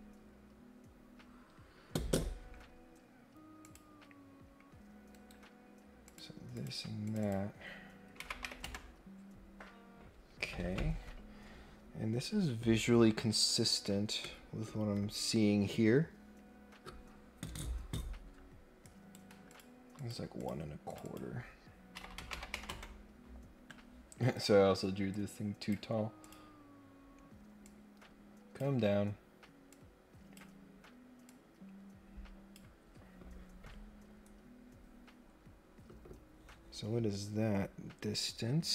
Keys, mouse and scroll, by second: 3.6 click, 5.1 Escape, 6.0 click, 6.5 click, 7.0 click, 7.2 click, 18.8 right click, 19.5 click, 19.9 click, 20.3 click, 20.9 click, 21.0 click, 24.2 Escape, 25.1 click, 26.2 click, 27.6 click, 29.7 click, 31.2-32.5 drag.